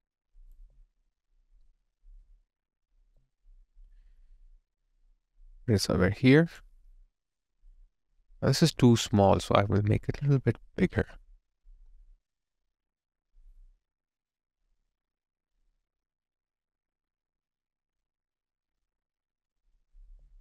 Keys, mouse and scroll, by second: 0.6 alt+click, 3.1 alt+right click, 3.4 alt+click, 3.9 alt+middle click, 20.1 alt+click.